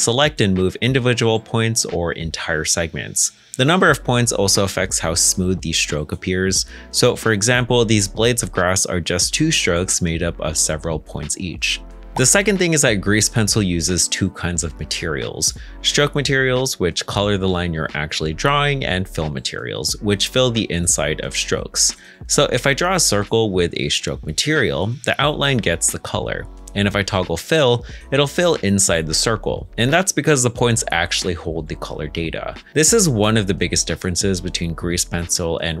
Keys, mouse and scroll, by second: 1.2 g, 4.6 ctrl+z, 5.5 middle click, 6.7 2, 10.1 Escape, 10.4 ctrl+z, 12.2 a, 12.8 1, 14.8 a, 15.5 middle click, 18.0 Tab, 18.4 a, 31.9 middle click, 34.0-34.5 scroll up 1, 34.7 shift+middle click, 35.5 g.